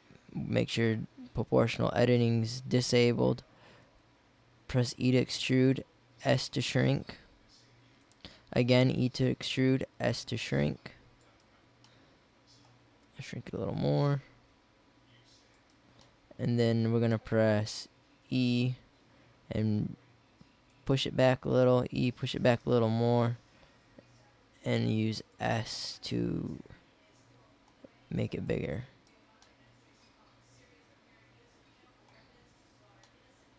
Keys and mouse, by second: 0.7-2.6 middle drag, 4.0 e, 5.7 s, 8.7 e, 9.7 s, 13.2 s, 15.8 middle click, 18.2 e, 21.4 e, 22.8 s, 25.6 click, 29.5 middle click.